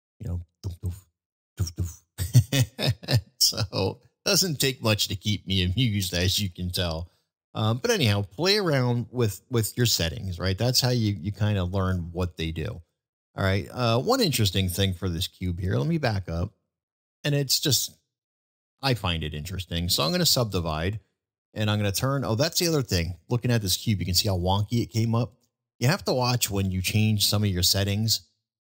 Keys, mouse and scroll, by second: 3.3-3.8 middle drag, 5.6-6.2 middle drag, 11.1-11.5 middle drag, 12.3 middle drag, 16.3 ctrl+z, 17.1 ctrl+z, 18.4 a, 23.7-25.3 middle drag.